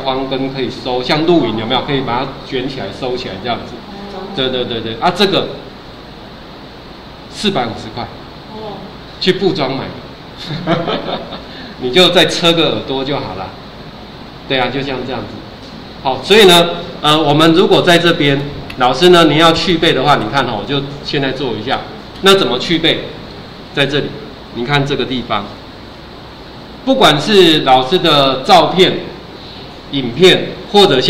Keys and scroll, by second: 26.1 ctrl+4.